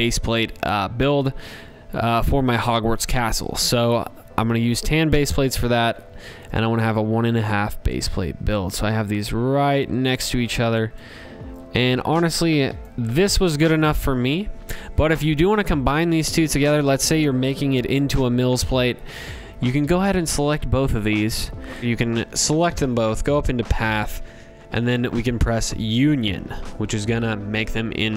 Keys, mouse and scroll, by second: 1.4 ctrl+c, 2.0 ctrl+v, 2.9 click, 3.7 click, 4.4 ctrl+c, 4.8 ctrl+v, 5.5 click, 9.9 shift+click, 11.7 click, 12.2 click, 14.3 click, 15.8 click, 17.1 shift+click, 21.8 click, 22.0 click, 25.2 click, 25.8 click.